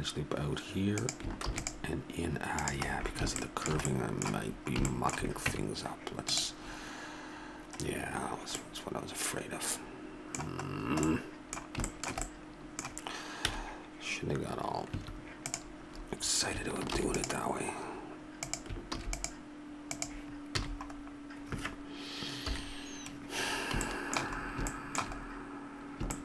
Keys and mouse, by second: 1.5 ctrl+r, 5.5 Tab, 13.5 ', 14.9 Tab, 16.9 ctrl+r, 18.9 ctrl+r, 20.6 a, 22.5 KP_1.